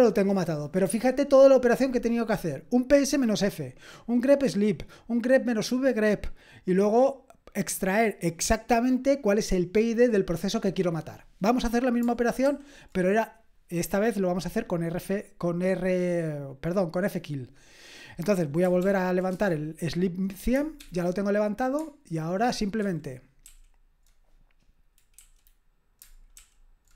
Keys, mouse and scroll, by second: 12.4 super+j, 18.8 ctrl+p, 19.3 Return, 20.8 super+p, 22.8 super+i, 23.4 super+k, 26.3 super+k.